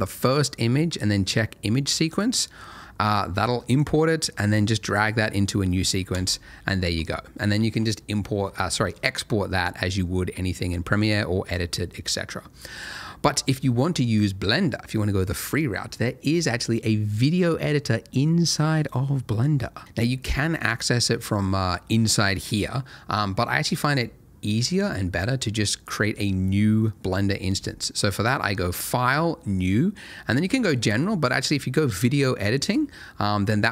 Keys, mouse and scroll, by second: 2.1 click, 6.1 space, 10.8 space, 11.4 click, 28.2 click.